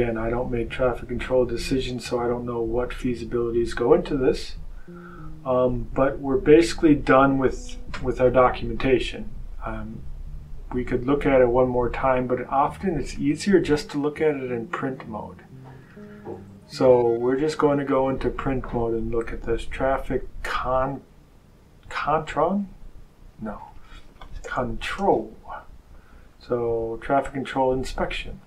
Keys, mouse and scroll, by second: 3.0 click, 13.0 click, 15.8 click, 20.7 click, 23.7 click, 24.3 BackSpace, 24.7 l, 27.1 click.